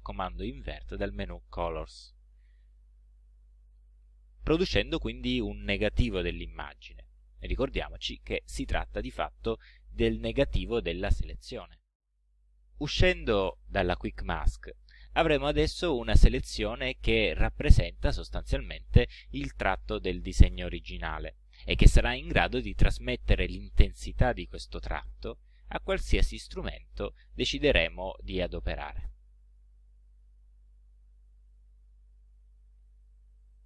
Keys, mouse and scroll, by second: 2.4 click, 14.2 shift+q, 16.9 middle click, 18.3 ctrl+scroll up 2, 29.9 ctrl+scroll down 2, 31.5 click, 32.3 click, 33.0 click.